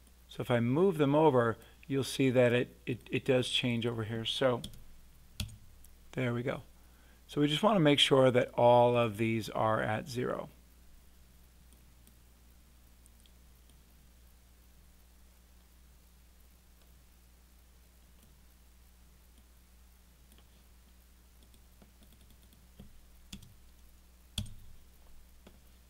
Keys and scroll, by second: 4.6 0, 5.4 Return, 23.3 0, 24.3 Return.